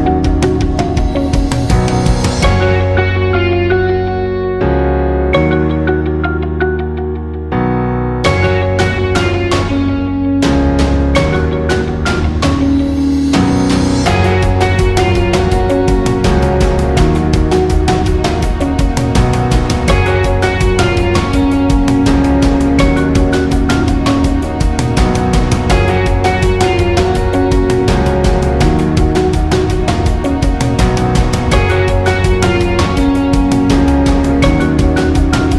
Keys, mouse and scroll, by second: 4.9-32.6 drag, 32.6-35.5 drag.